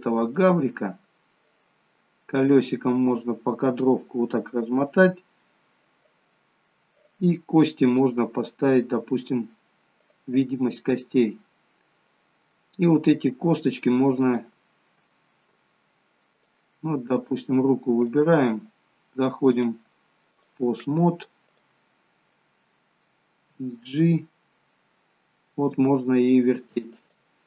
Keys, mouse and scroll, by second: 0.5 click, 2.1-4.1 scroll up 19, 8.0 click, 10.1 click, 10.9-11.6 scroll up 4, 11.6-12.2 scroll down 2, 12.2 middle click, 12.8-13.3 scroll down 2, 13.3 middle click, 14.2 click, 16.5 click, 18.0 click, 19.6 click, 21.6 click, 23.6 g.